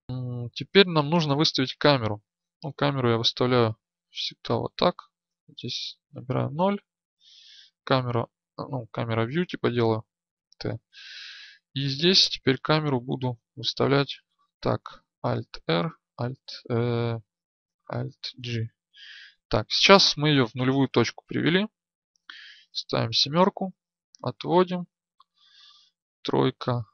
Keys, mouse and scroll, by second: 15.4 alt+r, 22.6 KP_7, 23.8-26.9 drag.